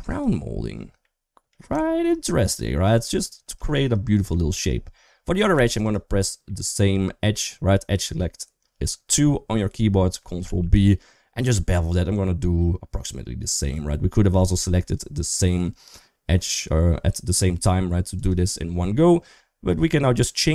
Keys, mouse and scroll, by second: 0.9 middle click, 1.7 shift+middle click, 3.5 shift+middle click, 3.9 middle click, 5.3 2, 6.3 middle click, 10.3 ctrl+b, 20.1-20.5 drag.